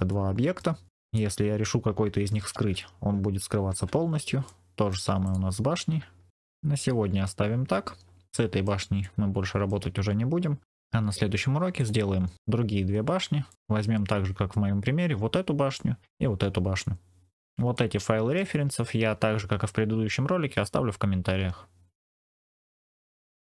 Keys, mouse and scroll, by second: 0.0 middle click, 0.8 click, 0.9 click, 2.3 h, 3.6 alt+h, 4.4 middle click, 5.1 click, 6.2 alt+h, 6.3-7.3 middle drag, 7.4-7.9 scroll down 2, 8.2 shift+middle click, 8.9 middle click, 10.0-10.5 scroll up 2, 10.6 scroll down 1, 11.7 click, 12.3 middle click, 12.3 scroll up 2, 12.9-13.4 scroll down 1, 13.4 middle click, 15.6 middle click, 17.7 middle click.